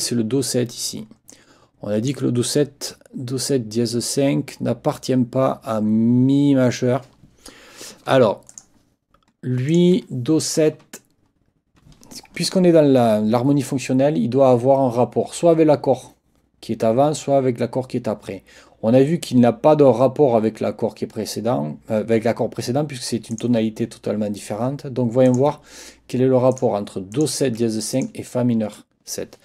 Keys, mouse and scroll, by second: 1.3 click, 8.5 click, 9.7 click, 23.3 click, 25.3 click, 26.5 click, 27.1 click, 27.9 ctrl+click.